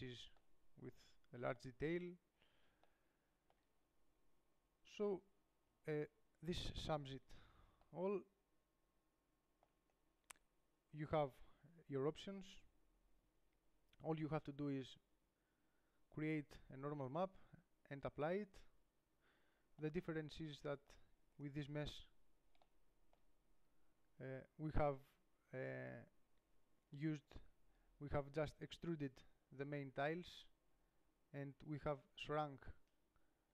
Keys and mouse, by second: 5.9 KP_7, 11.9-20.3 middle drag, 21.6-23.5 right drag, 22.1 Tab, 25.3-33.5 middle drag.